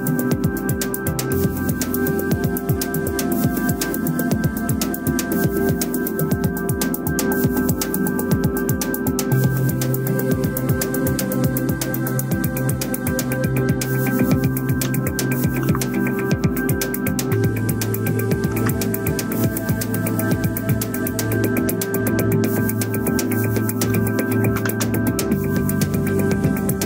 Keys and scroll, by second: 15.3 ctrl+c, 18.2 ctrl+v, 24.4 ctrl+shift+g.